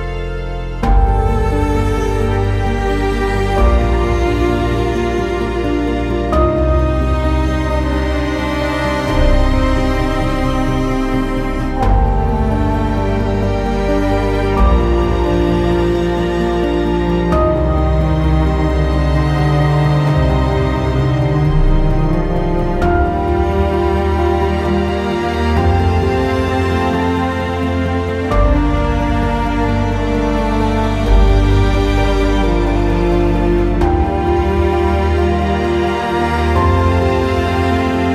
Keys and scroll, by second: 0.6 alt+x, 1.8 alt+x, 3.3 ctrl+x, 4.2 typing, 5.1 alt+x, 31.5 typing, 32.5 F4.